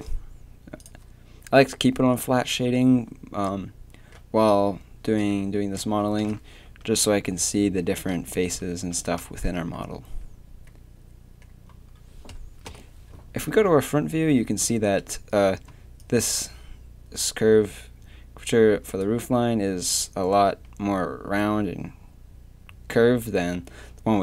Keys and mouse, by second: 0.8-3.6 drag, 6.2 KP_3, 6.7 Tab, 7.1 z, 7.5 z, 8.4 Tab, 8.8 Tab, 9.9 a, 12.7 KP_1, 15.7 d.